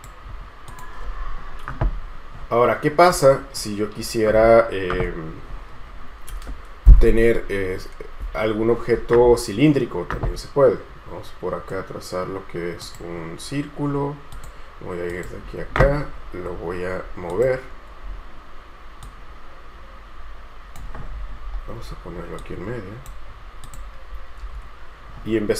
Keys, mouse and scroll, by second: 3.3 right click, 18.3-23.4 scroll up 1, 24.6 Escape.